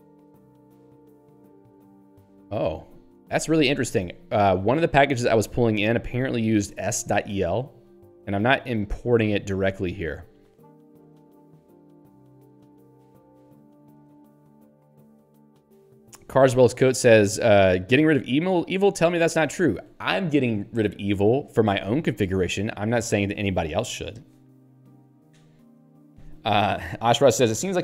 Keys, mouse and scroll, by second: 3.3 ctrl+g, 4.4 Down, 4.9 Up.